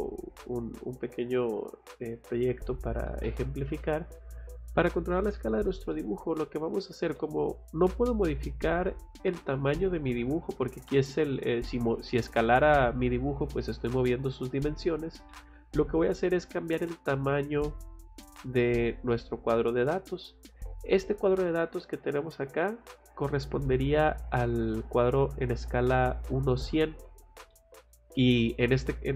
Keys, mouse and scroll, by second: 3.1 middle click, 3.8 middle click, 4.5 scroll down 2, 5.9 middle click, 7.2 middle click, 9.1 middle click, 10.7 scroll up 2, 14.9 scroll down 2, 15.3 middle click, 24.7 middle click, 27.5 middle click.